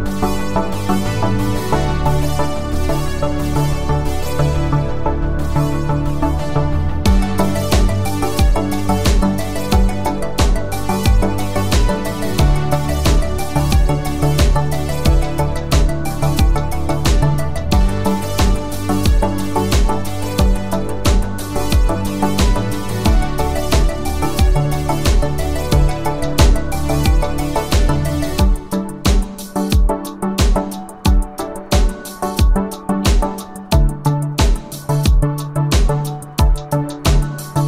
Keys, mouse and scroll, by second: 6.1 space, 6.3 click, 6.5 space, 8.6 click, 20.3 space, 20.5 click, 20.8 space, 22.4 space, 25.0 click, 35.7 space, 35.9 click, 36.2 space.